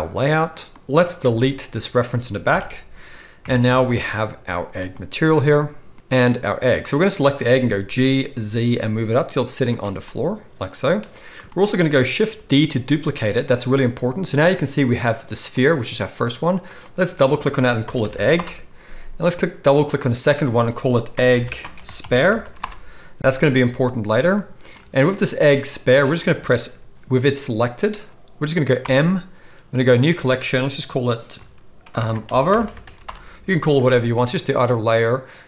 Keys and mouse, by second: 0.0-1.2 right drag, 1.2 middle click, 1.3-6.6 right drag, 2.5 Delete, 3.4 KP_1, 6.6-7.1 middle drag, 7.1-10.4 shift+right drag, 7.8 g, 10.4-13.6 drag, 12.3 shift+d, 13.6-15.5 middle drag, 15.5 click, 15.6-16.6 middle drag, 16.6-19.8 drag, 18.1 g, 19.8-21.2 middle drag, 21.2-27.9 drag, 21.4 g, 27.9-31.8 middle drag, 28.8 m.